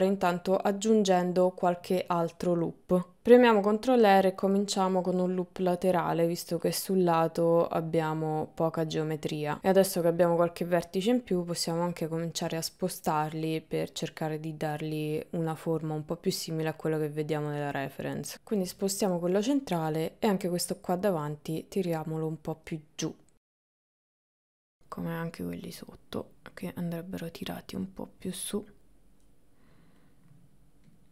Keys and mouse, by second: 0.9-2.1 drag, 3.2 ctrl+r, 5.2-6.9 drag, 7.5 middle click, 9.0-11.5 drag, 12.2 middle click, 13.2 KP_1, 13.7 KP_3, 14.9 ctrl+middle click, 15.9 click, 17.0 click, 18.3 click, 19.1 shift+middle click, 19.7 click, 20.7-23.5 drag, 23.9 click, 24.6 click, 25.7-27.9 drag, 29.3 middle click, 30.9 click.